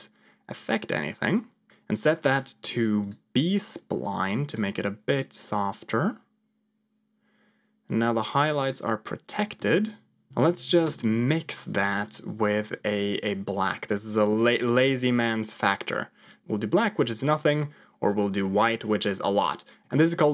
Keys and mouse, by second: 0.6 click, 2.1 click, 4.0 ctrl+click, 5.2-8.7 drag, 9.6 middle click, 16.1 click, 17.4-19.8 drag.